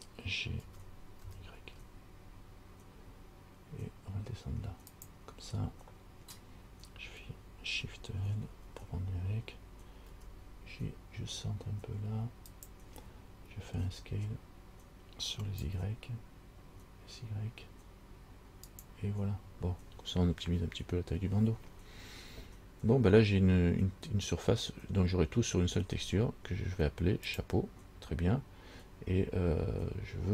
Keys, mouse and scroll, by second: 0.8 g, 8.7 shift+l, 10.3 g, 14.0 s, 27.5 click.